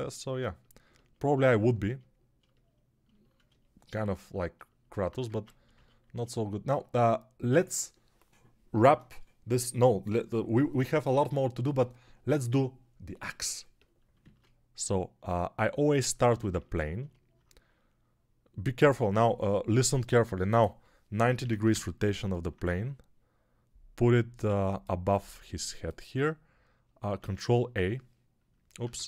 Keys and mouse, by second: 5.2 ctrl+Tab, 14.0-22.6 shift+middle drag, 14.1 shift+a, 22.6-29.0 drag, 24.2 Tab, 27.1 ctrl+a, 28.9 ctrl+Tab.